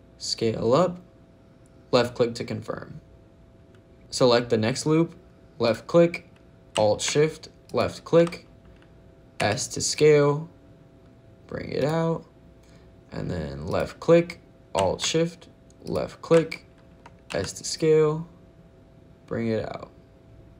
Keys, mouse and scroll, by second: 1.8 click, 5.5 click, 7.5 alt+shift+l, 9.2 s, 11.6 click, 13.5 click, 15.7 alt+shift+l, 17.1 s, 20.4 click.